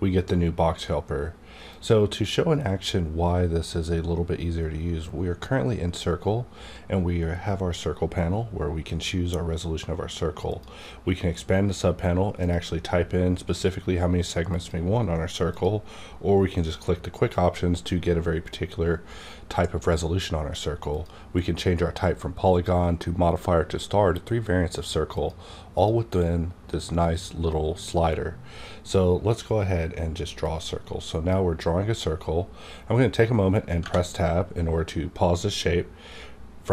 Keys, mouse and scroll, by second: 1.7 click, 12.4 click, 20.9 click, 23.0 click, 25.1 click, 30.4-33.6 drag, 35.6 Right, 35.6 click.